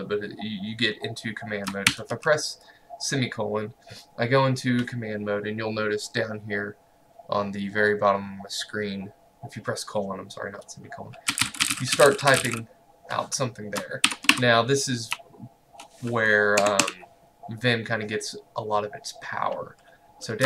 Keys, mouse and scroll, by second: 1.7 shift+Num_Lock, 2.2 shift+;, 11.1-12.9 typing, 14.1 shift+Home, 14.4 Delete, 15.2 BackSpace, 16.7 Escape.